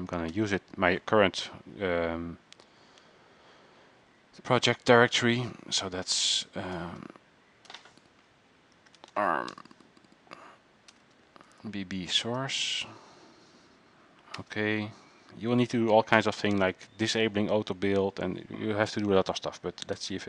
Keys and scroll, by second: 8.7-9.8 typing.